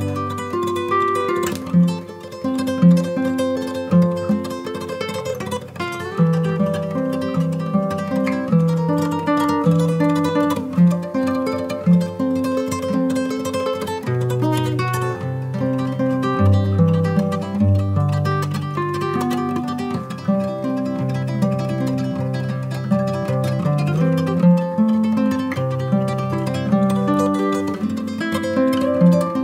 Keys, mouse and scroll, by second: 0.8 scroll down 2, 1.0 middle drag, 1.6 g, 3.3 click, 3.5 KP_1, 4.0 g, 4.4 x, 4.9 click, 5.1 scroll up 2, 6.3 r, 7.0 click, 9.4 click, 11.7-12.8 scroll up 2, 12.9 scroll down 1, 14.1 KP_3, 14.5-14.9 scroll down 4, 15.0 shift+a, 16.5 g, 16.6 y, 17.0 click, 17.3 KP_7, 17.8 r, 18.7 click, 19.0 KP_0, 19.4 scroll down 3, 19.7 scroll up 2, 20.5 click, 21.7 click, 22.5-23.6 drag, 26.4-29.4 drag.